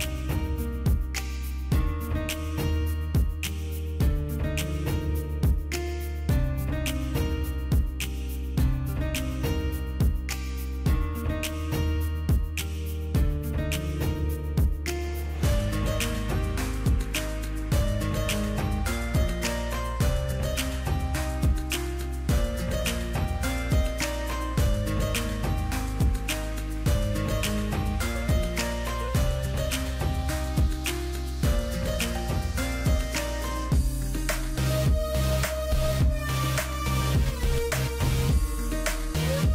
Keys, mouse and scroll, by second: 6.6 click, 7.3 ctrl+a, 10.3 ctrl+d, 11.1 double click, 13.2 double click, 22.9 0, 27.0 ctrl+j, 30.8 double click, 33.2 BackSpace, 36.1 double click, 38.6 right click.